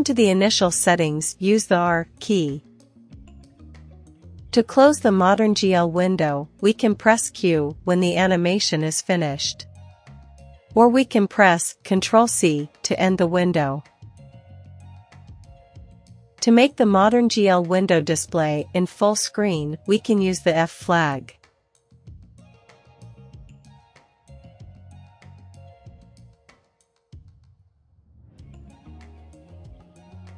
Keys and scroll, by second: 0.0-1.2 typing, 8.5 q, 10.5 typing, 13.8 ctrl+c, 16.4-16.7 typing, 21.4 Return, 22.9 1, 23.3 Return, 25.2-29.1 typing.